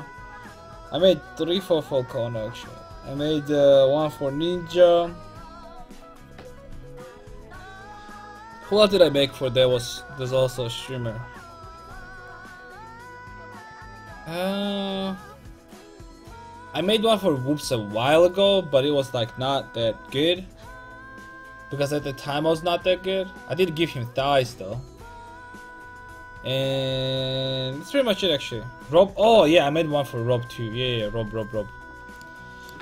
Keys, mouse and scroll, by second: 32.4-32.8 middle drag.